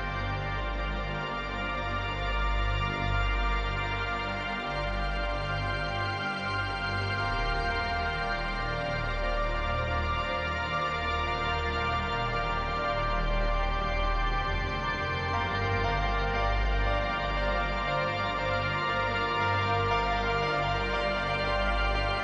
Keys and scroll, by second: 9.2 space, 10.9 space.